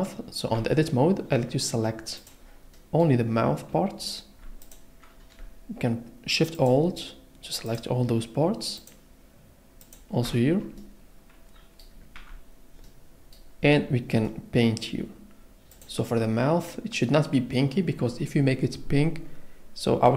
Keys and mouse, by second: 0.6 Tab, 2.4 click, 4.6 alt+click, 6.6 alt+shift+click, 8.8 alt+shift+click, 9.8 alt+shift+click, 12.2 Tab.